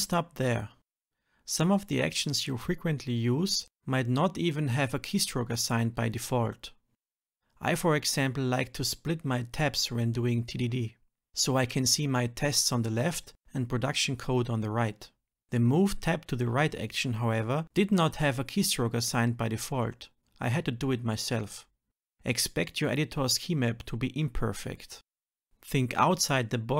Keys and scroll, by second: 0.3 Return, 2.1 Return, 3.4 Escape, 4.2 shift+F10, 5.7 ctrl+shift+Right, 6.6 shift+F10, 25.6 ctrl+alt+p.